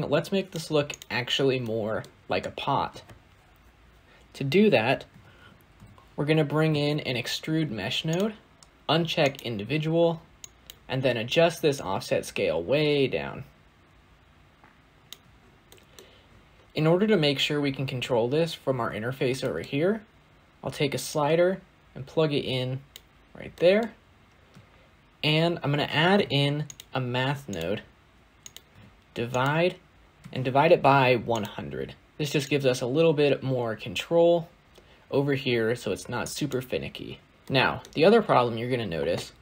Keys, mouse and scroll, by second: 6.5 shift+a, 9.1-14.7 drag, 22.8 click, 26.7 shift+a, 28.6-31.2 drag, 31.2 0, 32.4-36.1 drag, 37.3-37.8 middle drag, 37.8 scroll down 2, 37.9-39.4 scroll up 2.